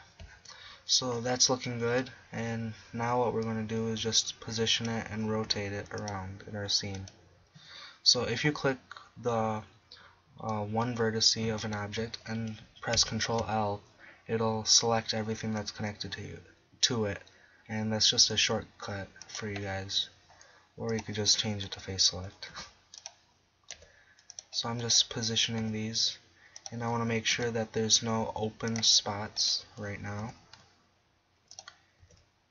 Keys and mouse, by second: 4.0 drag, 4.0 g, 4.9-5.5 drag, 5.5 r, 10.5-11.2 drag, 10.8 right click, 13.0 ctrl+l, 18.2 g, 19.4-20.6 drag, 22.5 r, 23.8 g, 25.6 g, 26.8-27.3 drag, 27.3 r, 30.2 r, 31.4 middle click, 32.0 g.